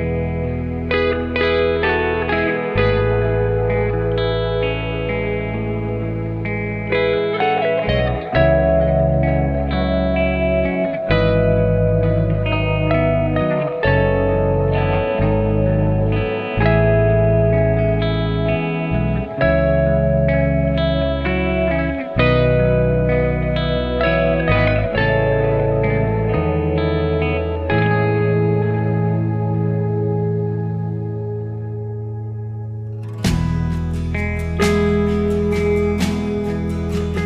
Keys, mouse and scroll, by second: 0.0 KP_0, 1.7 click, 2.2-8.1 scroll down 1, 8.1 click, 8.5-9.2 scroll down 5, 9.2-13.1 middle drag, 13.1 click, 14.4-15.2 scroll up 5, 15.2-17.1 scroll up 5, 17.1 click, 17.7-18.3 scroll down 5, 18.3-19.6 scroll up 5, 19.6 scroll up 1, 19.7 click, 21.6-24.1 scroll down 4, 24.1 click, 25.0-25.5 scroll up 5, 25.5-26.4 scroll down 5, 26.4 click, 28.3 click, 29.3 r, 35.1 click, 36.0 click.